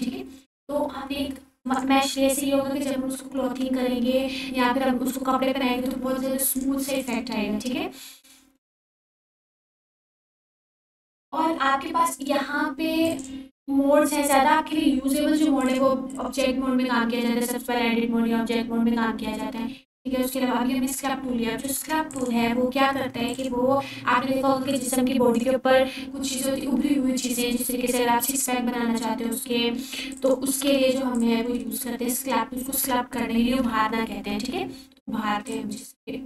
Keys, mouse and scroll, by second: 2.8 click, 7.6 click, 11.2 click, 14.2 click, 16.8 click, 23.3 click, 25.3-25.8 scroll up 1, 26.2-26.8 alt+click, 31.3 click, 32.3-34.2 alt+drag.